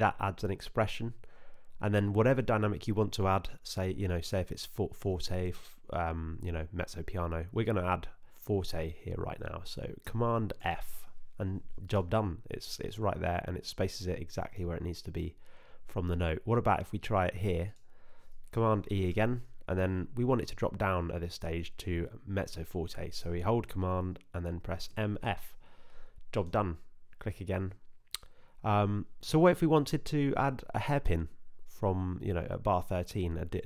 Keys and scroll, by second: 10.6 super+f, 19.1 super+e, 24.9 super+m, 25.2 super+f.